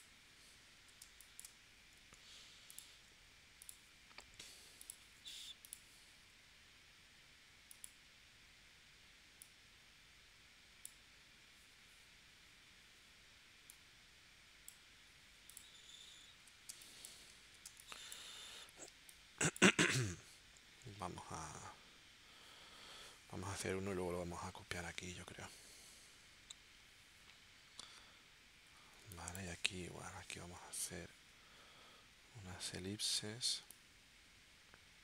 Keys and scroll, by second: 1.0 space, 1.8 a, 16.7 space, 17.7 space, 18.9 space, 21.3 v, 29.0 space, 30.0 l.